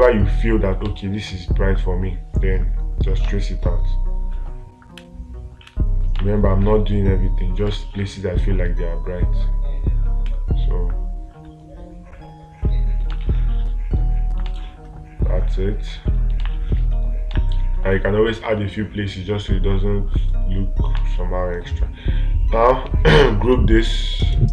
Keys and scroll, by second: 0.3 space, 1.3 space, 3.7 space, 6.6 space, 8.1 space, 13.5 space, 14.9 space, 16.9 ctrl+space, 21.4 ctrl+space.